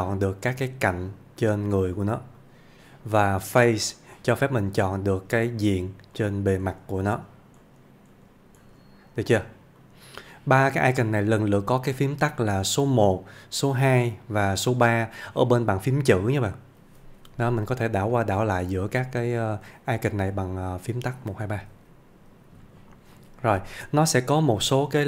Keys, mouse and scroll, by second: 17.3 typing, 18.5-19.5 typing, 23.2 click.